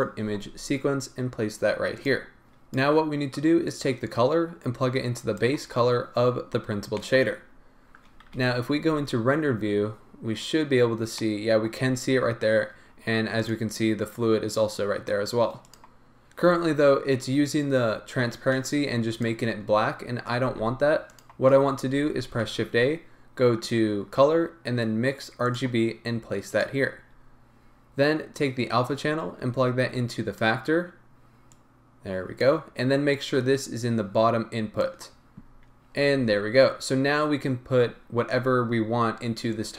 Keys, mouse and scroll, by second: 0.0-5.4 drag, 7.5-13.5 middle drag, 7.5-9.0 scroll up 2, 9.0 z, 11.9-13.5 scroll up 2, 13.5 click, 13.6-14.8 middle drag, 15.7 click, 16.4-16.8 scroll down 1, 17.9 scroll up 1, 18.2-18.7 scroll down 1, 18.7-19.0 drag, 25.6 shift+a, 26.6 click, 27.1-28.4 scroll up 1, 28.4 click, 31.6 click, 33.3 click, 35.9-37.4 scroll up 2, 37.4-39.7 scroll down 2.